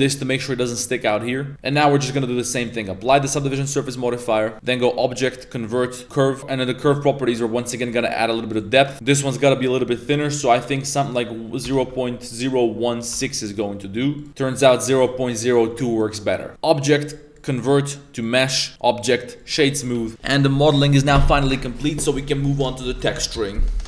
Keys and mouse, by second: 0.9 middle click, 0.9 a, 1.5 Tab, 2.6 click, 3.1 ctrl+a, 3.4 shift+middle click, 4.4 middle click, 4.5 Tab, 4.6-6.0 drag, 7.8 click, 8.6 click, 8.9 a, 10.0-13.2 drag, 14.2 click, 14.9 click, 15.7 middle click, 16.3 middle click, 16.5-18.2 drag, 18.7-19.5 drag, 19.8 a, 20.0 middle click, 20.0 a.